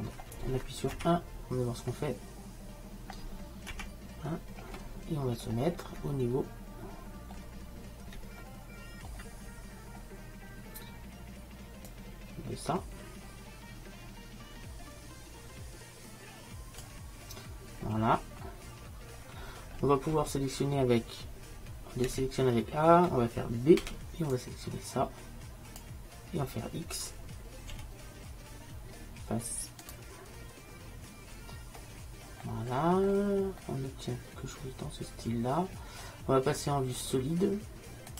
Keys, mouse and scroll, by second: 5.2-6.3 middle drag, 8.0 middle click, 10.3-12.0 middle drag, 12.0-13.9 drag, 17.9 middle click, 19.5-22.3 middle drag, 22.2 a, 23.9 b, 27.9 x, 34.7 middle click.